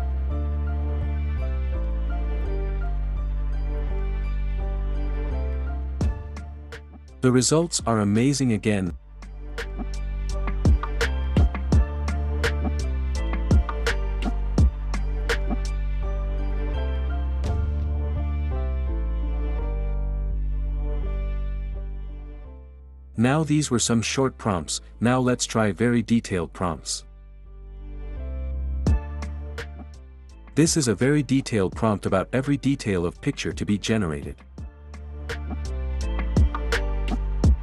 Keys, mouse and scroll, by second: 9.3 click, 12.2-13.2 drag, 13.8-14.8 drag, 15.0-16.1 drag, 16.3-17.3 drag, 17.6 click, 22.1 Escape, 23.4-24.3 drag, 26.9-28.0 drag, 33.2-34.9 drag, 36.2 ctrl+c.